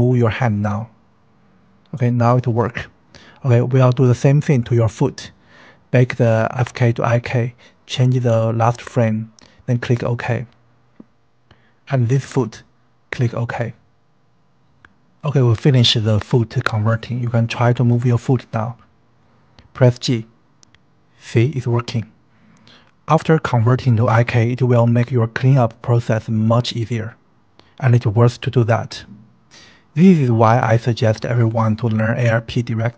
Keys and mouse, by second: 0.8 g, 4.7-10.9 drag, 6.6 KP_5, 11.6 click, 11.8-14.4 drag, 14.7 click, 16.2 ctrl+s, 18.7 click, 19.5 g, 21.5 click, 22.0 g, 23.2 space.